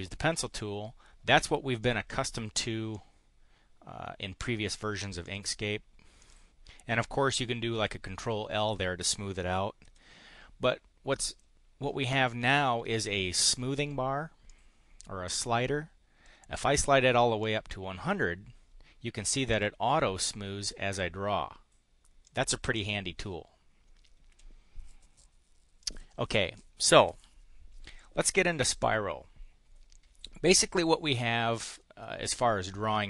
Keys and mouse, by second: 1.8 click, 2.0 click, 2.8-4.8 drag, 5.2 click, 6.2 click, 9.8 Delete, 11.2 click, 14.4-16.3 drag, 17.4 click, 19.2 click, 19.5 click, 20.1 click, 22.2 click, 22.8 click, 24.2 Delete, 25.8 click.